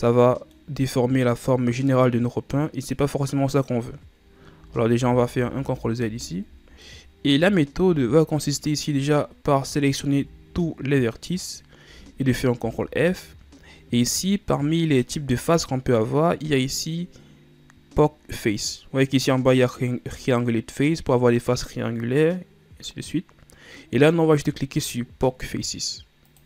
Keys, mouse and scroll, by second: 0.0-1.0 middle drag, 1.0-2.2 scroll up 1, 4.7 ctrl+z, 5.1 ctrl+z, 5.5 ctrl+z, 5.8 ctrl+z, 7.0-8.0 middle drag, 8.0 a, 8.8-10.3 shift+scroll up 2, 10.3 a, 12.8 ctrl+f.